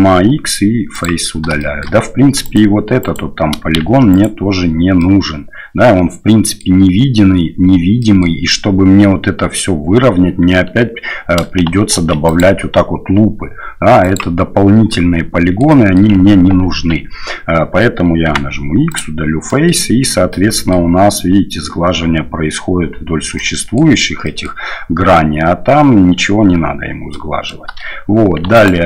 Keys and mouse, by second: 1.6 shift+middle click, 2.4 right click, 3.0 right click, 3.8 shift+z, 4.1 right click, 5.0-6.6 middle drag, 8.0 middle click, 11.9 ctrl+r, 15.0 click, 15.7 click, 16.7 ctrl+z, 18.2 x, 19.5 click, 20.3 click, 23.3 click, 24.2 click, 27.1 click, 28.5 alt+right click.